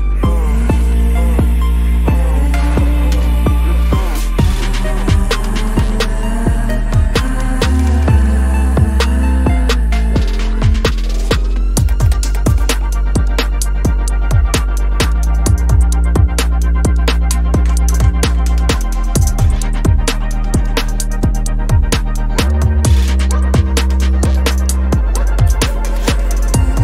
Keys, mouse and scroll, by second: 0.0 double click, 0.1 space, 0.3 double click, 0.6 space, 0.6 double click, 0.7 space, 1.7 alt+click, 2.7 space, 4.6 space, 6.8 ctrl+z, 8.0 space, 8.8 ctrl+z, 10.0 ctrl+z, 11.2 space, 12.2 double click, 12.3 space, 12.5 double click, 13.5 double click, 13.5 space, 14.3 alt+click, 14.9 space, 15.8 alt+click, 16.0 ctrl+-, 16.1 ctrl+-, 16.3 space, 16.7 right click, 18.6 ctrl+-, 18.8 ctrl+-, 25.7 ctrl+=, 25.9 ctrl+=, 26.2 ctrl+=.